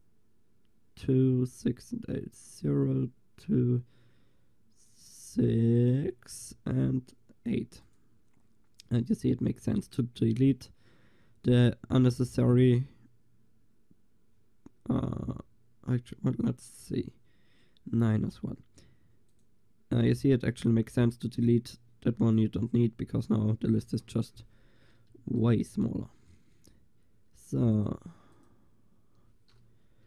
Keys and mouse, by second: 1.8-4.9 middle drag, 4.9-21.3 drag, 21.3-25.2 middle drag, 25.2 ctrl+s, 25.2-30.0 drag.